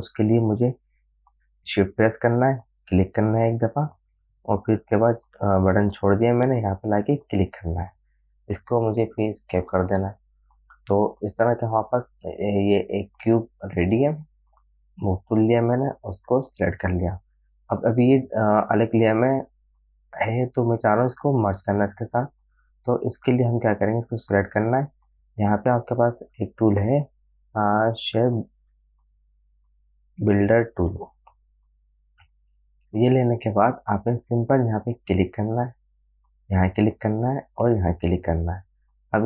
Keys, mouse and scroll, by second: 2.2 shift+Num_Lock, 3.2 shift+click, 7.6 shift+click, 14.8-18.1 drag, 22.5-26.0 drag, 26.8 right click, 27.7 click, 28.9 right click, 34.3 click, 35.5 click.